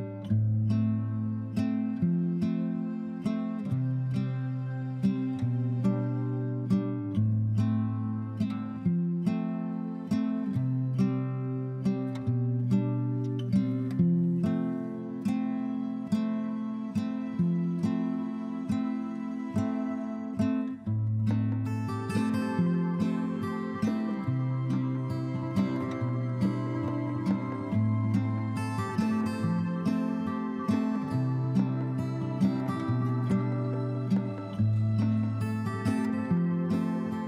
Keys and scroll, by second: 3.9 b.